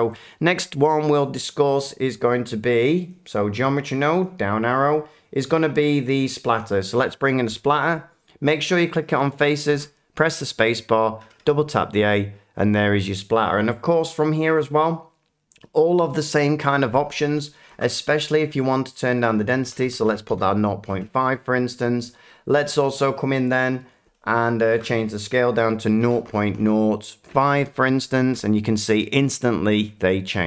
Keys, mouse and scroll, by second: 0.2 click, 3.1 click, 4.2 click, 6.6 click, 9.7 a, 19.0 click, 19.6-20.0 typing, 20.3 Return, 25.2 click, 26.0-26.5 typing, 27.5 Return.